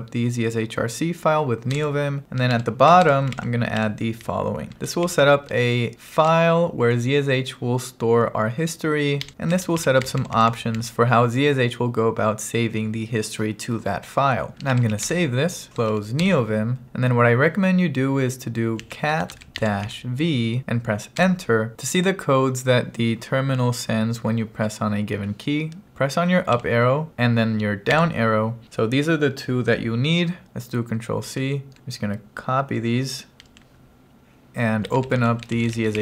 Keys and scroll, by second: 1.8 Return, 2.3-4.8 typing, 6.3 shift+v, 9.6 j, 10.1 j, 10.6 j, 15.0-16.5 typing, 15.1 Return, 18.6-20.4 typing, 21.3 Return, 26.6 Up, 28.0 Down, 31.3 ctrl+c, 33.6 super+c, 34.7-36.0 typing.